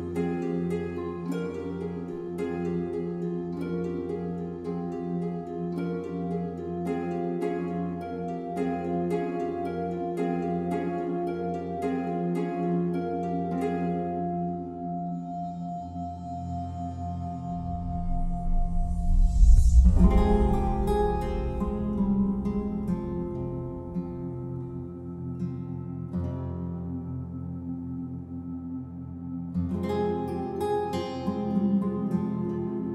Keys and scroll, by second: 15.3 ctrl+u.